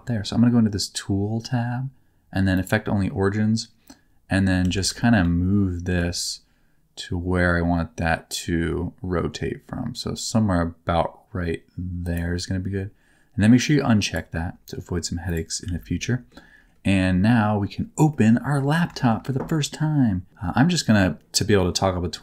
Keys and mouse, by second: 2.5 middle click, 4.6 alt+z, 5.0 shift+middle click, 5.9 g, 15.6 alt+z, 16.0 middle click, 18.1 middle click, 19.0 shift+middle click.